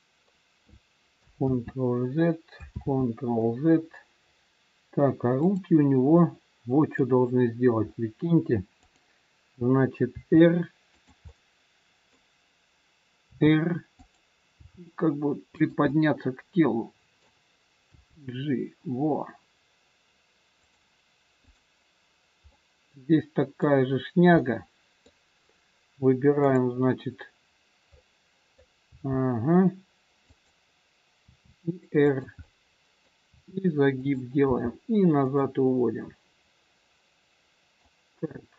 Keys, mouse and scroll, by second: 1.5 ctrl+z, 2.7 ctrl+z, 5.3 click, 6.3 middle click, 7.8-8.3 scroll up 3, 8.8 click, 10.0 r, 11.3 middle click, 13.2 r, 14.4 g, 15.9 middle click, 17.9 g, 21.4 click, 22.5 middle click, 22.5 scroll up 1, 24.5 middle click, 25.4 click, 26.4 click, 27.9 middle click, 28.9 g, 31.3 r, 32.4 middle click, 33.1 r, 34.4 g, 35.6 middle click.